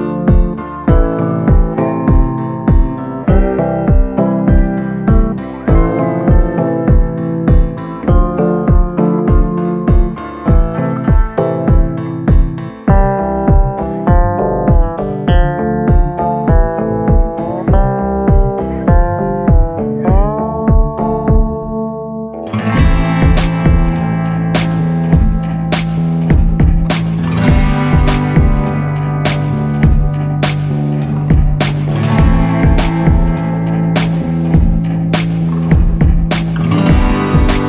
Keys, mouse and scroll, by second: 23.9 ctrl+a.